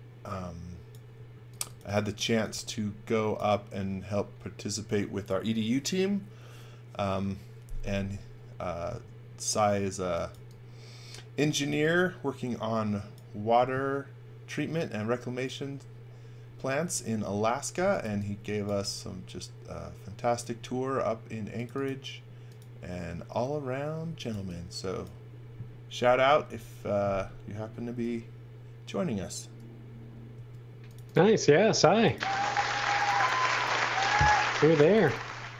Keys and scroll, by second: 1.1-3.0 typing, 9.9 x, 10.3 v, 11.4-12.1 typing, 17.5-18.5 typing, 20.5 space, 23.8-24.7 typing, 30.3 space, 34.5-35.5 typing.